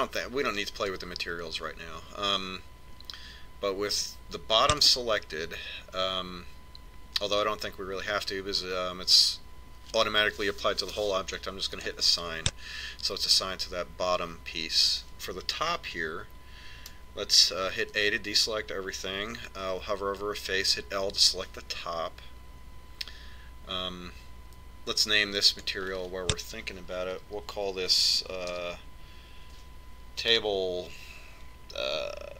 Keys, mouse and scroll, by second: 4.6 click, 12.3 click, 18.5 a, 21.2 l, 26.2 click.